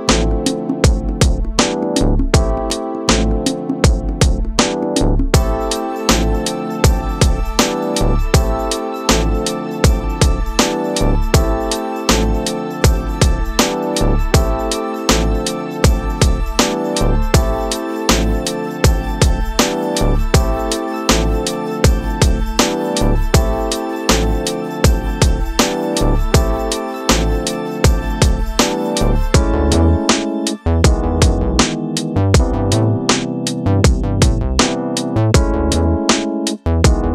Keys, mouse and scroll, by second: 0.0 click, 0.6 scroll up 1, 1.5-3.6 scroll up 1, 3.6 click, 4.8-5.3 scroll down 7, 6.3-8.0 drag, 8.0-8.6 scroll down 2, 8.6-9.3 drag, 9.3-10.3 scroll down 3, 10.3-13.3 drag, 13.4-14.1 drag, 14.1-15.3 scroll up 2, 15.3-18.5 drag, 18.6-20.6 middle drag, 20.6-21.0 scroll down 1, 21.0-27.9 middle drag, 27.9-30.8 drag, 30.8-36.5 middle drag.